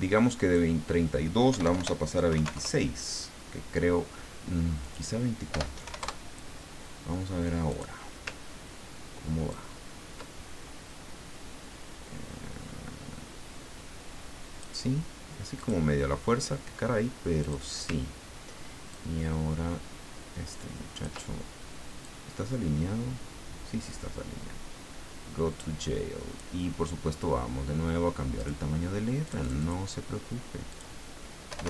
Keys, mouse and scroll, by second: 0.3 click, 1.5 BackSpace, 2.3 KP_2, 2.4 KP_6, 2.5 KP_Enter, 4.8 click, 5.5 BackSpace, 5.8 KP_4, 6.0 KP_Enter, 7.7 click, 9.5-14.7 ctrl+drag, 15.6 click, 17.4 click, 18.9-21.3 ctrl+drag, 22.0-28.7 drag, 29.2 click, 30.7 click, 31.5 BackSpace.